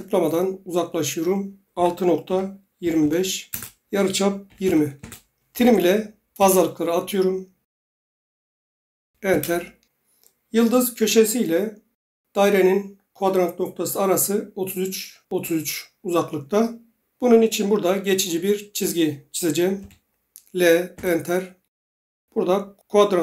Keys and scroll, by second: 1.7-6.0 typing, 6.3 Return, 9.3 Return, 19.7 typing, 20.9 Return.